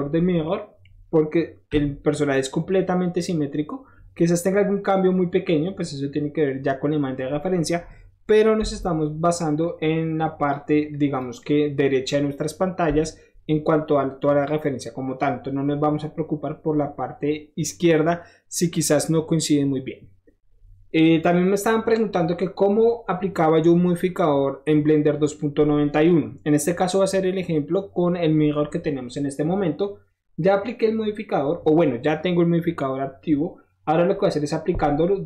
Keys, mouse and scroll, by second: 0.2 scroll down 1, 0.4-0.8 middle drag, 1.8 KP_1, 4.1 scroll up 1, 5.7 middle click, 6.8 middle click, 7.3 middle click, 7.6 middle click, 8.7 7, 9.6-10.5 drag, 10.9-11.2 drag, 11.4-11.8 drag, 15.1 middle click, 15.2 middle click, 20.8 middle drag, 21.0 middle click.